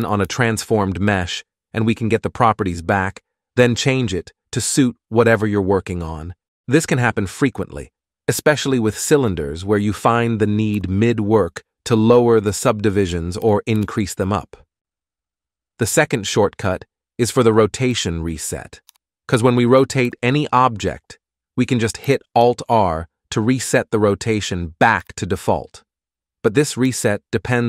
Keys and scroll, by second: 0.4 ctrl+alt+a, 13.3 x, 14.0 shift+a, 18.1 g, 18.8 r, 22.6 alt+r, 26.7 r.